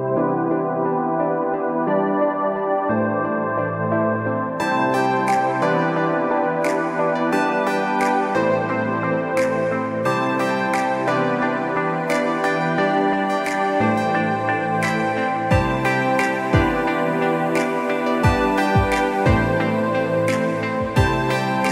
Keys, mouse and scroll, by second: 0.4-1.1 alt+scroll down 4, 0.5 space, 0.9 click, 1.1 space, 1.3 click, 3.0-3.4 alt+scroll up 3, 3.5 click, 4.2 click, 4.8 click, 13.3 click, 13.7 scroll, 14.3 click, 14.6 alt+scroll down 1, 15.3 click, 15.4 scroll down 1, 15.9 click, 16.2-16.6 scroll up 1, 16.6 click, 18.7 click, 20.2 click.